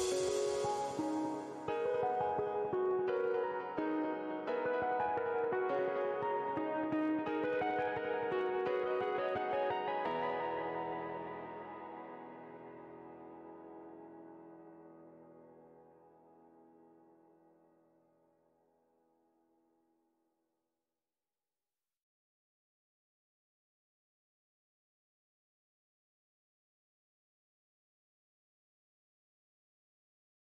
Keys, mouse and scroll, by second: 5.1 scroll down 1, 5.9 ctrl+w, 11.3 scroll down 1, 17.0 scroll down 1, 20.9 ctrl+w, 23.1 scroll down 1.